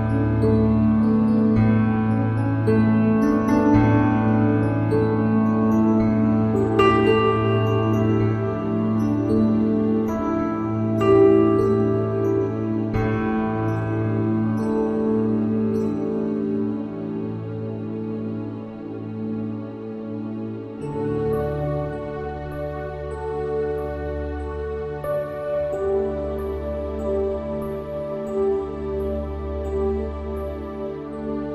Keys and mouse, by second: 14.3 click, 28.3 click, 29.8 click.